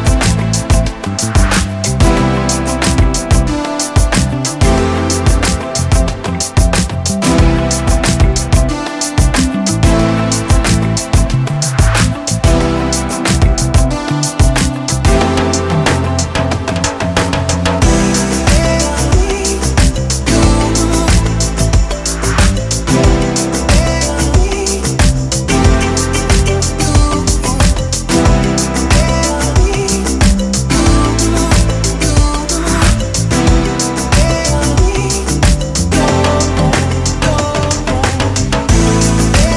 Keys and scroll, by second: 20.3 Escape, 20.9 4, 21.0 Return, 21.6 4, 21.6 Return, 22.6 2, 22.6 Return, 23.3 2, 23.4 Return, 29.2 Escape.